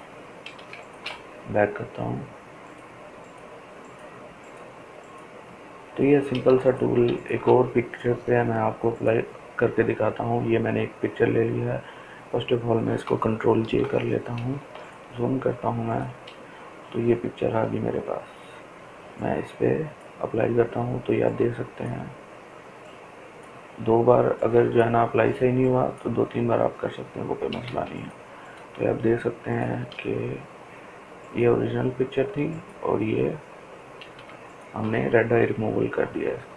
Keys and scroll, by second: 5.9 ctrl+space, 6.4 ctrl+space, 6.4 ctrl+space, 13.0 ctrl+j, 33.6 ctrl+space, 36.2 ctrl+space.